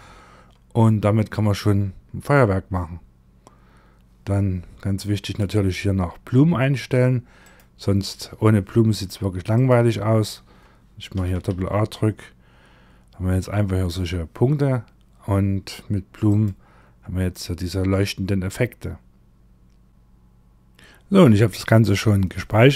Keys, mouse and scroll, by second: 0.6-3.4 scroll up 27, 3.4-4.6 scroll up 1, 4.6 click, 6.9 click, 9.0 click, 10.6 a, 10.8 a, 15.8 click.